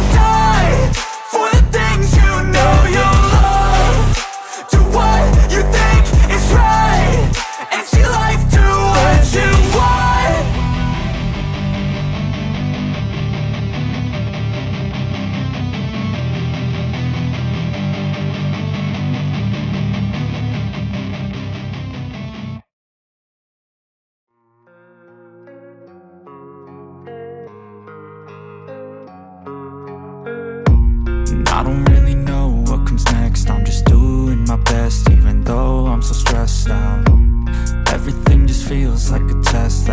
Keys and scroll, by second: 0.8 space, 1.0 =, 1.1 space, 1.8 ctrl+s, 10.3 Left, 11.0 Left, 12.2 ctrl+s, 13.0 BackSpace, 13.4 =, 15.8 Delete, 26.5 BackSpace, 27.3 ctrl+s, 39.5 Return, 39.7 Return.